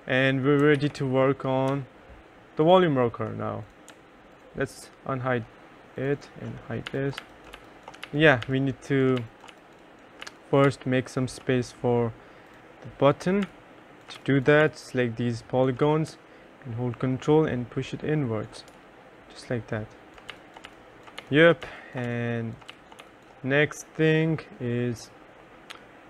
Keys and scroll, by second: 0.8 ctrl+s, 6.7-10.8 typing, 13.5 3, 14.3 1, 14.7 3, 18.8 3, 20.4-23.1 typing.